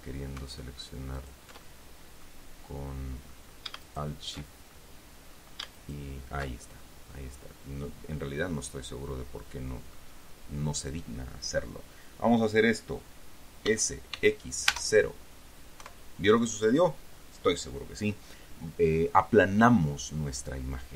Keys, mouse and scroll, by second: 0.1 alt+shift+right click, 1.5 alt+shift+right click, 2.0 alt+shift+middle click, 2.3 shift+right click, 2.4 middle click, 2.5 right click, 3.0 middle click, 4.2 alt+shift+right click, 5.1 alt+shift+middle click, 6.1 alt+shift+right click, 7.1-7.4 alt+shift+scroll down 3, 7.5-10.4 drag, 14.0 s, 14.5 x, 15.0 KP_0, 16.1 KP_Enter.